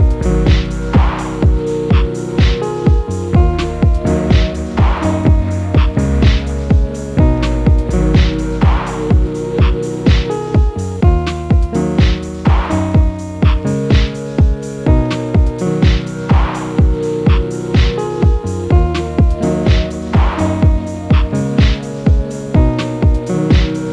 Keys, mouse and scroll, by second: 2.5-3.2 scroll down 1, 3.2 r, 4.0 s, 6.4 scroll down 1, 6.5-7.4 middle drag, 7.4 g, 8.6 click, 8.9-9.5 middle drag, 10.9 g, 14.0 click, 14.4 g, 16.0 click, 16.5 g, 18.0-19.3 middle drag, 19.3 click, 19.6-20.4 scroll down 1, 20.5 click, 20.9-21.3 scroll up 1, 21.3-21.8 middle drag, 21.8 click, 22.2 middle click, 22.6 g.